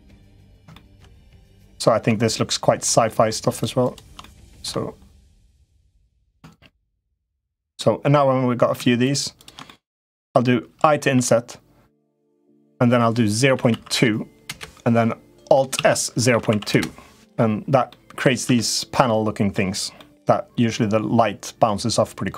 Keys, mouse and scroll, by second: 0.5 shift+middle click, 1.4 middle click, 2.1 shift+middle click, 2.8 shift+middle click, 3.2 shift+click, 3.6 shift+click, 4.0 middle click, 4.9 shift+click, 5.2 shift+click, 5.8 middle click, 7.0 shift+click, 7.5 middle click, 8.8 shift+click, 9.1 shift+click, 9.4 middle click, 15.5 alt+s, 17.6 middle click, 18.2 Tab, 18.8 middle click, 19.7-21.8 middle drag, 22.1 Tab.